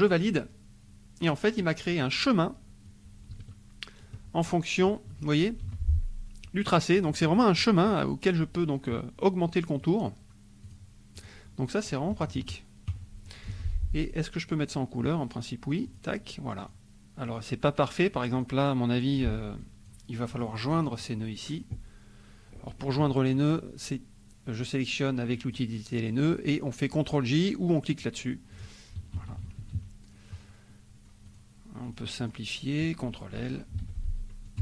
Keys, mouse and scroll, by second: 0.0 click, 1.3 click, 1.6 middle click, 2.8-4.3 drag, 4.7 click, 5.1 middle click, 5.6 F2, 7.1 middle click, 7.2 click, 7.5 middle click, 9.8 right click, 10.7 click, 11.1 click, 12.1 KP_Subtract, 13.5 F2, 14.0 click, 15.8 click, 16.6 click, 17.3 click, 18.3 click, 19.6 click, 20.3 middle click, 20.3-21.2 scroll up 1, 21.3 click, 24.6-25.7 drag, 27.9 click, 28.5 click, 29.2 KP_Subtract, 30.7 middle click, 31.3 click, 31.8 click, 32.2 click, 33.8 ctrl+l, 34.4 click.